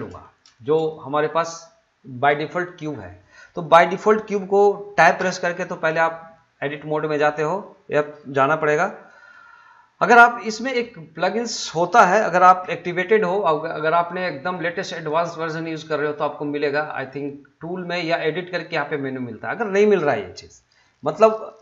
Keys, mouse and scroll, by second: 0.5 shift+middle click, 5.2 Tab, 5.8 middle click, 11.6 middle click, 13.8 click, 20.3 middle click.